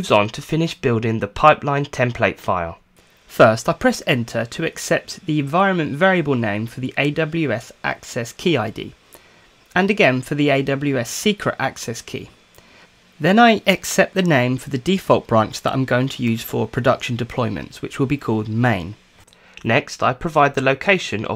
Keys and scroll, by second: 7.9 Return, 9.6 Return, 12.3 Return, 19.8-21.3 typing.